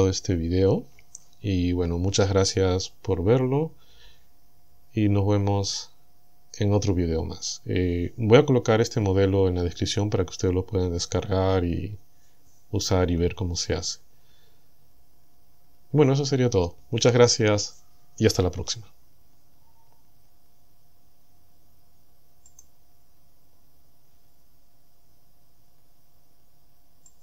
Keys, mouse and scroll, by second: 22.5 click.